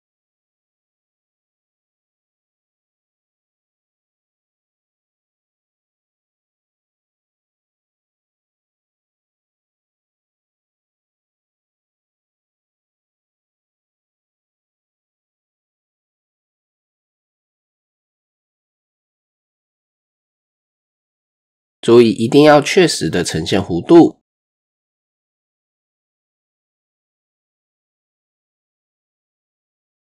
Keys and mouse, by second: 0.8-2.3 drag, 2.5 click, 4.5 r, 5.7 click, 7.1 click, 7.5 click, 8.4 drag, 9.4-10.7 drag, 11.0 click, 11.8 click, 12.2-13.2 drag, 13.9-14.9 drag, 15.3 click, 15.6 click, 16.8 ctrl+r, 19.5 click, 22.2 click, 22.5-23.8 middle drag, 25.1-26.6 drag, 26.6 Tab, 28.4 Tab.